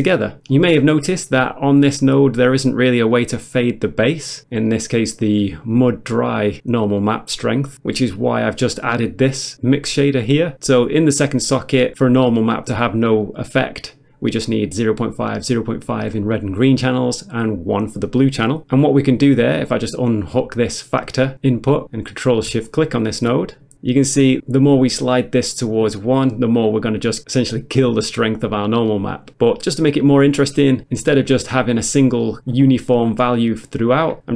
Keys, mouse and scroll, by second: 0.5 middle click, 1.4 middle click, 4.7 middle click, 4.9 middle click, 8.7 click, 10.9 click, 18.6 click, 20.5 click, 22.7 ctrl+shift+click, 24.2 click, 26.8 click, 28.3 click, 30.2 click, 31.6 click, 32.3 click.